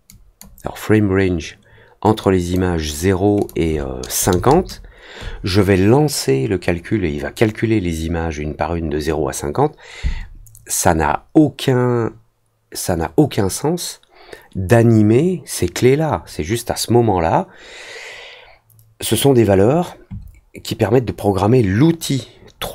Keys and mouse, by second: 0.0 click, 2.2 click, 3.3 click.